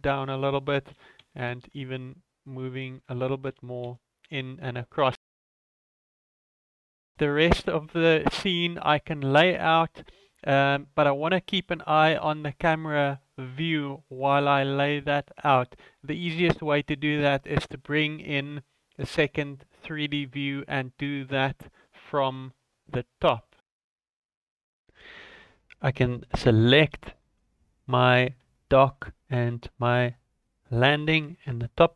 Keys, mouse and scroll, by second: 0.9 g, 3.4 g, 8.4 ctrl+s, 17.8 click, 19.4-20.1 scroll down 2, 20.1 KP_7, 21.0-21.4 scroll down 4, 22.1 shift+middle click, 22.5-23.1 scroll up 2, 26.0 click, 27.7 shift+click, 29.7 shift+middle click, 30.6-31.6 scroll down 2.